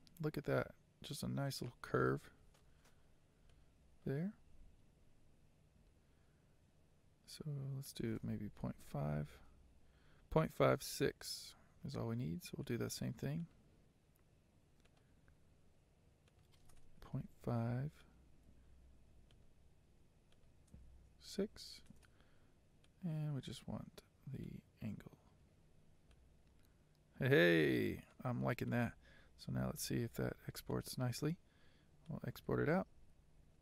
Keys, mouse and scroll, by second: 3.0-3.6 scroll down 1, 3.6-9.0 shift+middle drag, 9.0-12.8 drag, 21.7-26.3 drag, 26.3-28.3 middle drag, 28.3-28.8 scroll down 4, 28.8 middle click, 29.4-29.8 scroll down 4, 29.8-30.8 middle drag, 30.8 click.